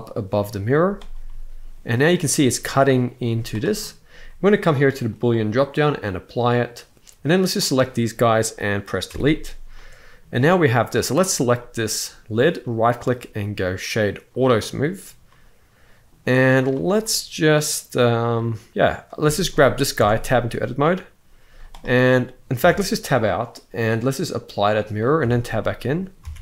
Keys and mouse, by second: 0.2 middle drag, 0.5 z, 1.0-1.9 middle drag, 3.0 z, 3.6 middle drag, 4.8-6.2 drag, 7.1 click, 8.8 Delete, 9.5-9.9 middle drag, 11.3-12.1 middle drag, 12.3-14.2 right drag, 15.0-15.8 middle drag, 16.3 click, 16.7-18.8 middle drag, 19.0 shift+middle drag, 19.7 Tab, 20.0 middle click, 21.2 z, 22.3 Tab, 23.7-24.4 drag, 24.9 Tab, 25.3 middle click, 26.0 alt+a.